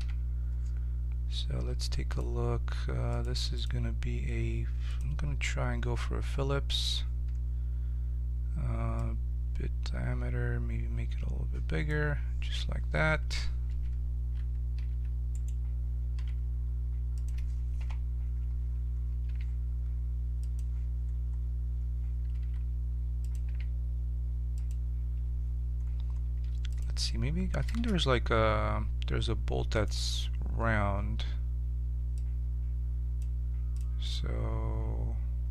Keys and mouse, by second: 2.2-5.5 drag, 8.9-12.2 drag, 13.6 a, 14.3 a, 14.8 a, 15.3-17.1 drag, 16.1 s, 17.7 KP_7, 19.2 g, 19.4 click, 20.8 middle click, 22.4 s, 23.4 g, 26.3 x, 27.7 shift+a, 32.1-35.5 drag.